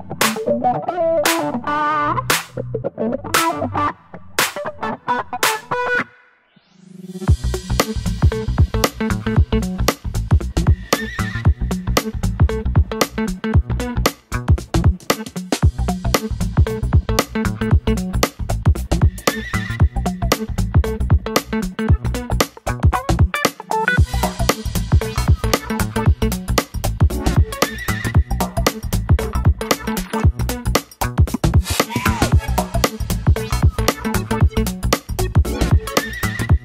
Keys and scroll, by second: 0.0 Left, 2.3 Right, 2.7 super+Down, 2.9 super+Down, 5.9 Left, 6.0 Left, 8.9 Left.